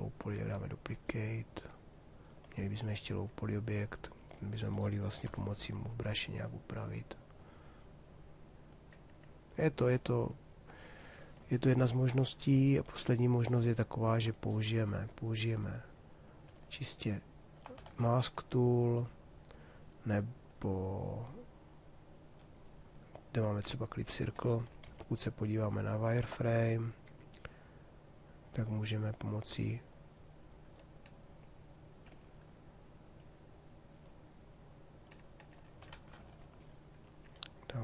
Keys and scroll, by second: 4.8 4, 17.5 ctrl+z, 24.5 shift+f, 35.5 ctrl+z.